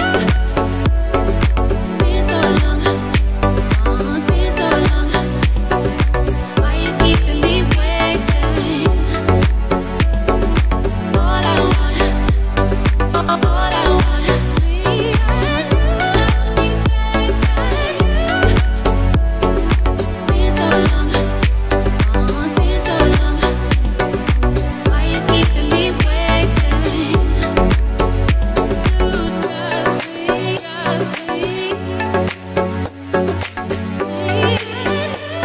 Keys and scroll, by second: 0.3 ctrl+g, 4.6 r, 5.9-7.1 typing, 8.0 Return, 18.2 ctrl+g, 21.6-23.5 typing, 23.8 Return, 34.6 h.